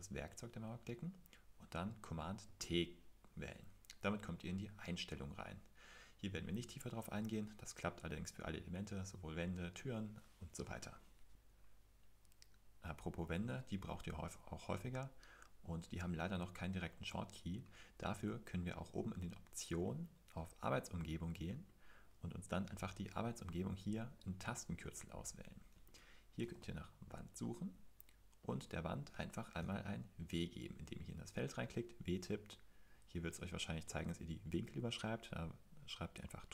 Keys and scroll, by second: 2.4 super+t, 26.1-27.1 typing, 29.6 typing.